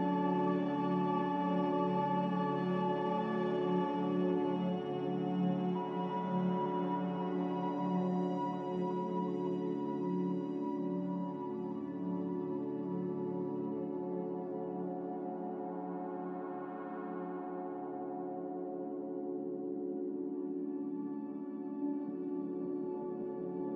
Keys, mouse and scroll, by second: 1.2 z, 14.1 b, 16.2 ctrl+b, 18.8 a, 19.8 a.